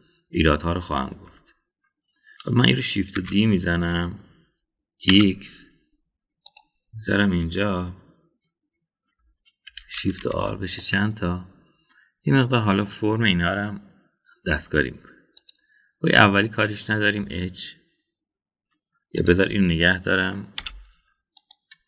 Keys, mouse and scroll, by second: 2.1 Tab, 4.1 shift+d, 10.7 shift+r, 11.0 shift+r, 11.2 shift+r, 11.8-13.9 middle drag, 13.9 scroll down 1, 16.4 click, 17.4-18.2 middle drag, 20.2 click, 21.7 ..